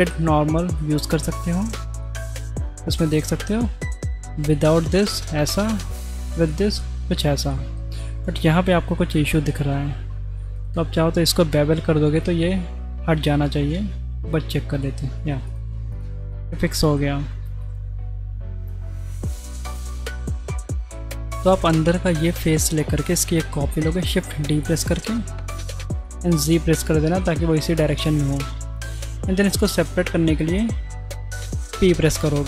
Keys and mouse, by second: 2.0-2.4 middle drag, 3.2 middle click, 4.5 click, 5.6 right click, 6.5 middle click, 7.6 shift+click, 8.9 Tab, 9.9 2, 10.6 alt+click, 13.6 ctrl+b, 15.7 Tab, 16.4-17.0 middle drag, 17.6-20.0 middle drag, 19.3-20.0 drag, 19.3-20.0 right drag, 20.7 shift+middle click, 23.7 shift+d, 26.0 middle click, 26.8 middle click, 27.8 middle click, 31.6 p.